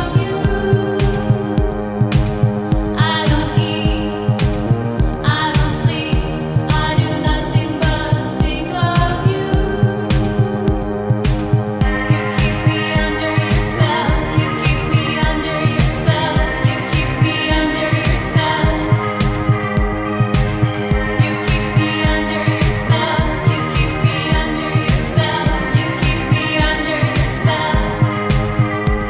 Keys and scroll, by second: 3.0 ctrl+z, 7.3 space, 12.2 ctrl+z, 14.3 ctrl+z, 14.6 ctrl+z, 24.9 ctrl+z, 28.6 ctrl+z.